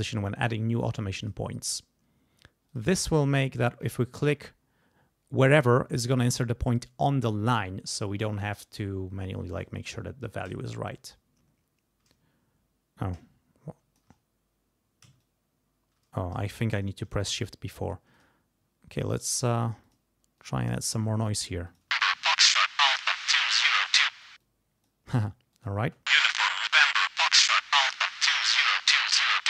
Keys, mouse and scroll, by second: 1.2 click, 2.7 click, 3.5 click, 10.3-14.1 shift+drag, 15.2-16.9 shift+drag, 18.1 click, 19.0 click, 20.4 click, 21.7 middle click, 21.9 space, 24.1 space, 25.5 click, 25.8 space.